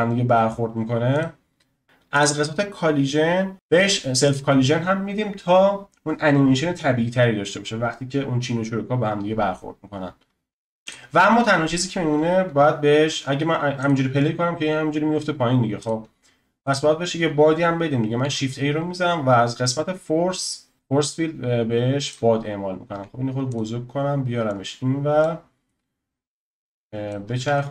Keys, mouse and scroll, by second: 1.1-2.6 drag, 2.6-3.5 scroll down 9, 3.5 click, 4.3 click, 10.8 click, 11.1-13.8 scroll down 2, 13.8-18.2 drag, 18.2 shift+a, 22.9 s, 24.5 click, 26.5 click, 27.5 ctrl+z.